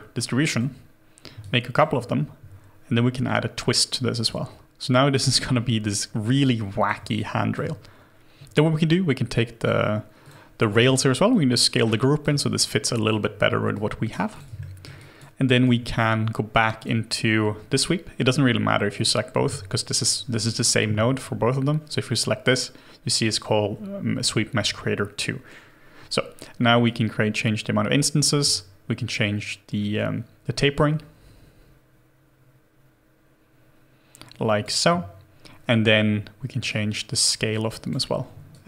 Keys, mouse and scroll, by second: 1.4 alt+click, 2.9-5.1 scroll down 1, 7.2 alt+click, 8.1 double click, 10.7 r, 12.4 alt+click, 15.0 alt+click, 15.5 alt+right click, 29.6-33.1 scroll down 1.